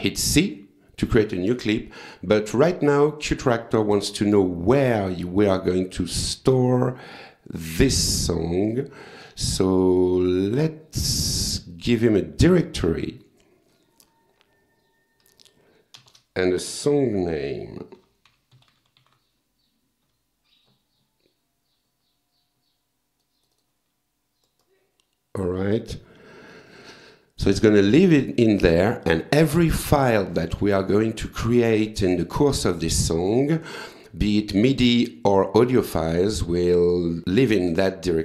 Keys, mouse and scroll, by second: 0.3 c, 2.4 click, 3.7 click, 5.4 click, 7.6 click, 10.2 click, 11.7 click, 13.7 click, 17.4-20.1 typing, 23.2 click, 24.5 click, 25.6 click, 26.7 click, 28.6 click.